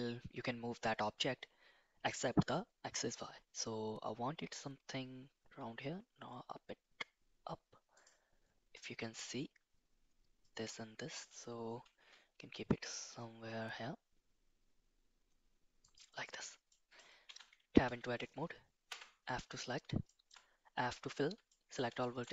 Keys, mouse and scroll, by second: 11.8 g, 16.7-17.0 middle drag, 17.3 Tab, 17.8 a, 18.9 f, 20.0 shift+middle click, 21.5 middle click, 22.0 shift+middle click.